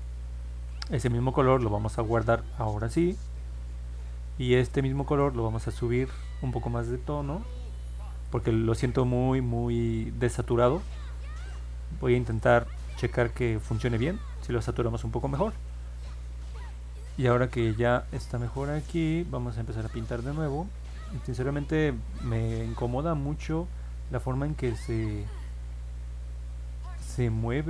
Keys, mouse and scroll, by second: 0.8 click, 3.0 click, 5.2-8.2 drag, 12.3 click, 13.4 click, 22.8 middle click, 23.2 middle click, 23.6 middle click, 23.7 scroll down 1, 24.6 alt+middle click, 25.6 scroll down 1, 26.4 alt+middle click.